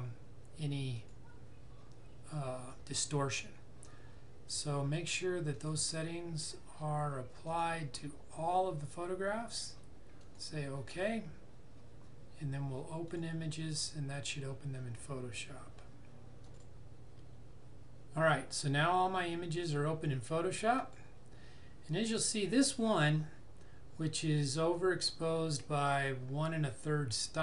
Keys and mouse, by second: 1.0 click, 5.6 click, 12.4 click, 13.1 click, 16.5 click, 20.8 click.